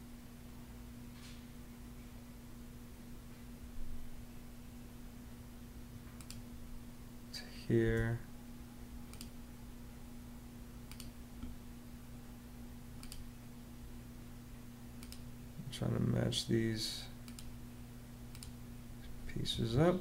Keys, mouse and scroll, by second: 7.6 space, 19.3 Escape.